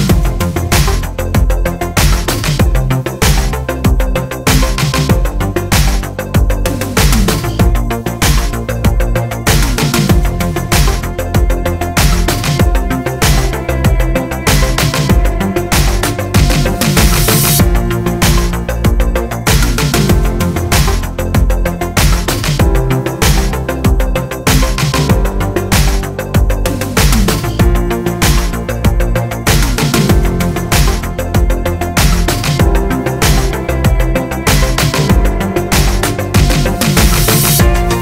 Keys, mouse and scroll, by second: 3.6 click, 6.8 r, 12.4 click, 13.9-20.7 drag, 14.1 z, 23.1-38.0 drag, 33.9 KP_3, 35.9 r.